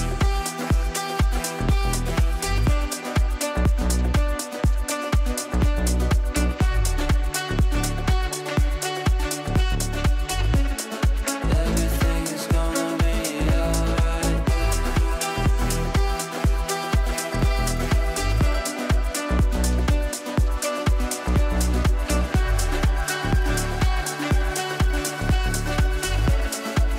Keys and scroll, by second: 0.7 Right, 3.2 Up, 13.9 Up, 24.4 Delete.